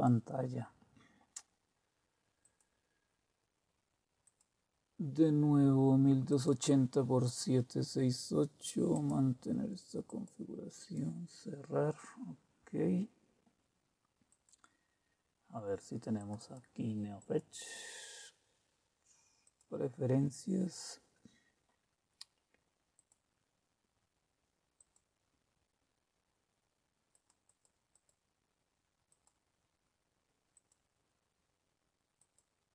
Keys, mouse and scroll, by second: 2.4 click, 4.2 click, 6.3 click, 6.8 click, 8.9 click, 14.3 click, 16.1 click, 17.2 right click, 19.4 click, 22.9 click, 24.7 click, 27.1 click, 27.4 click, 27.9-30.1 drag, 32.1 click.